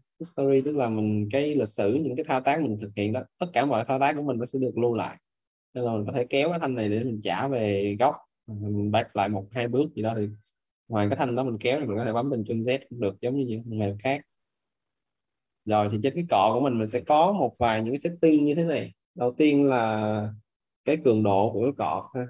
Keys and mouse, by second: 1.4 click, 12.4 ctrl+z, 13.9 click.